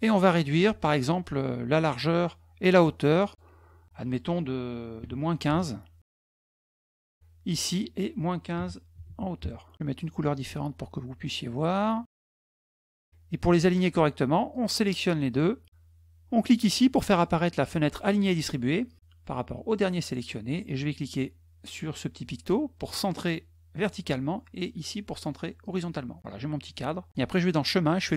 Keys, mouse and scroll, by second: 3.0 click, 6.3 Return, 7.4 click, 10.2 click, 12.1 click, 12.7 click, 14.3-15.6 drag, 18.0 click, 18.9 click, 23.5 click, 25.4 click, 27.1 click.